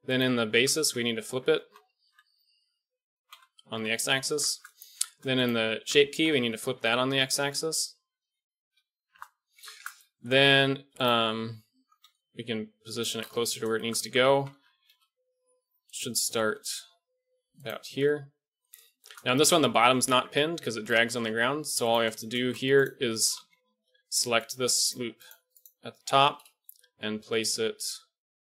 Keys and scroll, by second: 0.5 Tab, 0.8 a, 0.9 a, 1.5 s, 4.2 Tab, 5.7 Tab, 6.1 a, 6.2 a, 6.4 s, 9.5 Tab, 12.0 g, 14.0 Tab, 14.3 a, 14.5 a, 14.9 g, 16.3 g, 17.8 Tab, 20.0 Tab, 23.3 z, 26.6 g.